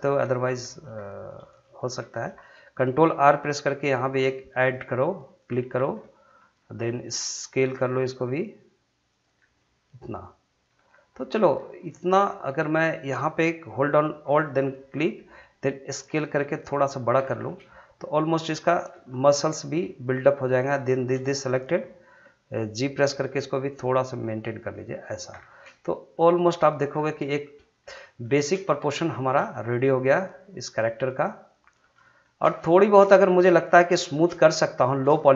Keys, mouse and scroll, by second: 0.7 shift+middle click, 1.5 shift+middle click, 1.8 scroll up 2, 2.0 shift+middle click, 2.4 middle click, 3.8 ctrl+r, 4.6 click, 5.7 scroll down 1, 6.0 middle click, 6.6 scroll up 1, 6.8 middle click, 7.8 s, 9.1 click, 9.4 scroll down 1, 9.6 middle click, 10.7 scroll up 1, 11.1 middle click, 11.8-14.4 middle drag, 14.4 alt+click, 15.2 middle click, 15.9 s, 16.9 click, 17.2 scroll down 1, 17.5 middle click, 19.1 scroll up 1, 19.3 middle click, 20.0 click, 20.7 shift+click, 21.3-23.1 middle drag, 23.1 g, 25.1 click, 25.3 scroll down 1, 25.5 middle click, 26.2 middle click, 27.0 scroll down 1, 27.2 middle click, 27.8 scroll up 1, 28.2 shift+middle click, 28.6 middle click, 29.1 shift+middle click, 29.5-31.9 middle drag, 31.9 scroll up 1, 32.2 shift+middle click, 32.5 middle click, 33.0 scroll up 1, 33.2 shift+middle click, 33.7 middle click, 34.0 shift+middle click, 34.4-34.8 scroll down 2, 34.8 middle click, 35.2 shift+middle click.